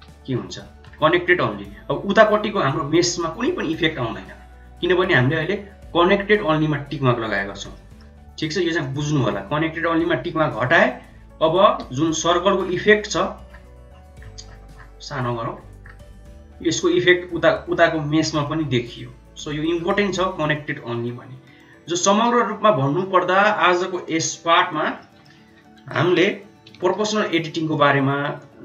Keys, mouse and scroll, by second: 7.7 middle click, 8.9-10.7 drag, 11.6 g, 19.9-20.9 drag, 21.7 Tab, 22.1 middle click, 23.1 Tab, 23.5 middle click, 23.9 click, 24.9 middle click, 25.9 KP_7, 27.5 shift+z, 27.5 click, 28.3 click.